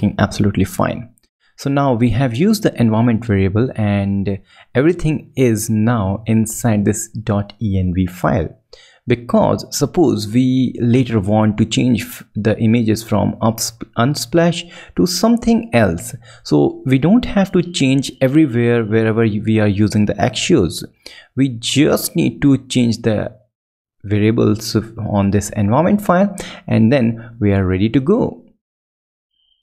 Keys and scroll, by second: 5.8 alt+super+Right, 11.7 alt+Left, 12.9 alt+shift+Left, 14.8 alt+shift+super+Right, 17.8 Down, 18.4 shift+Up, 19.2 shift+super+Up, 19.6 shift+super+Down, 21.7 super+Right, 23.5 super+Right, 25.5 shift+Up, 26.5 shift+super+Up, 26.6 shift+super+Right, 27.2 alt+super+Right, 28.3 alt+shift+super+Right.